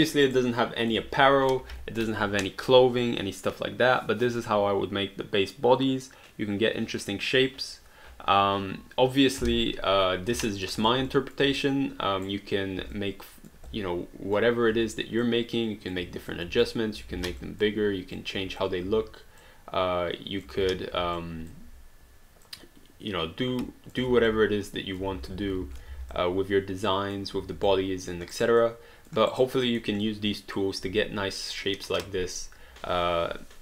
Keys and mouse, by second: 0.0 alt+middle click, 0.3 alt+right click, 0.6 alt+click, 10.4 alt+click, 10.8 click, 11.1 alt+click, 11.6 right click, 12.9 alt+click, 13.7 click, 15.2 click, 16.6 alt+click, 17.0 ctrl+alt+click, 17.1 ctrl+z, 17.4 alt+click, 18.2 click, 18.9 w, 19.4 click, 20.6 ctrl+z, 21.2 alt+click, 22.4 click, 24.1 alt+d, 24.4 alt+click, 25.1 ctrl+z, 25.6 ctrl+z, 25.9 alt+d, 26.1 alt+click, 27.7 alt+click, 28.4 alt+right click, 28.6 alt+click, 29.3 alt+right click, 29.7 alt+middle click, 30.1 alt+click.